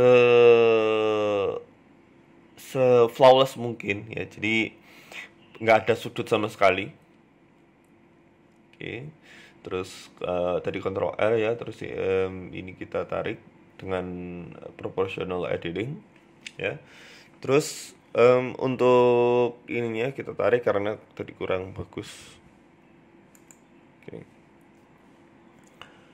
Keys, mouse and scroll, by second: 0.1 s, 1.7 click, 1.9 click, 4.1 z, 5.3 middle click, 5.8 scroll down 1, 6.0 middle click, 6.4 ctrl+r, 8.2 middle click, 8.9 right click, 9.4 KP_7, 9.8 scroll up 2, 11.9 click, 12.7 g, 15.5 click, 16.3 shift+click, 17.0 g, 20.5 Tab, 20.8 middle click, 21.4 KP_7, 21.5 Tab, 22.2 click, 22.8 shift+middle click, 25.1 click, 25.9 Delete.